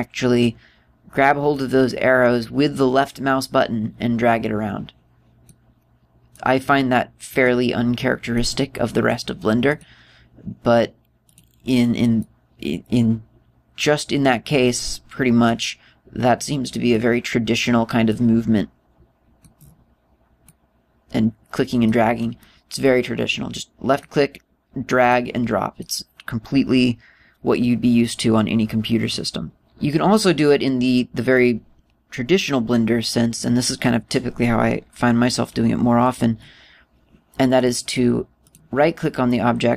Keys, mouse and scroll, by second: 2.2 click, 7.0 click, 10.3 click, 11.9 right click, 12.8 click, 16.1 click, 18.7 click, 21.1 click, 23.5 click, 25.8 click, 38.2 right click, 39.1 right click.